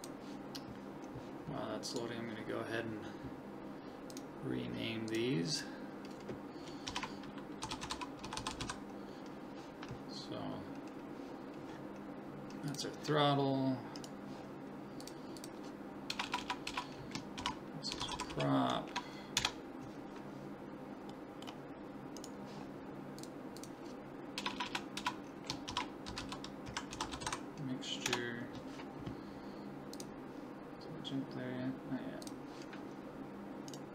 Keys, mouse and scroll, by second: 1.9-3.9 right drag, 4.1-6.9 drag, 8.4 t, 14.0-15.7 right drag, 15.0 click, 16.3 BackSpace, 16.4 BackSpace, 21.2-22.2 middle drag, 22.2-23.8 right drag, 23.2-25.0 drag, 24.5 BackSpace, 24.7 BackSpace, 33.7-33.9 right drag.